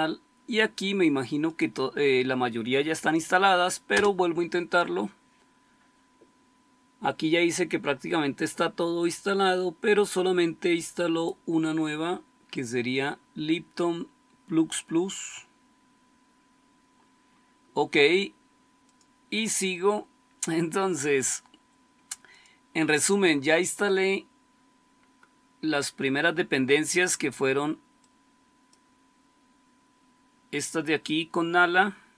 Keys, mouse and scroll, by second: 3.9 Return, 23.7-25.3 scroll up 1, 25.3-27.9 scroll down 1, 27.9-28.7 scroll down 1, 28.7-31.8 scroll down 1, 31.8-32.1 scroll down 1.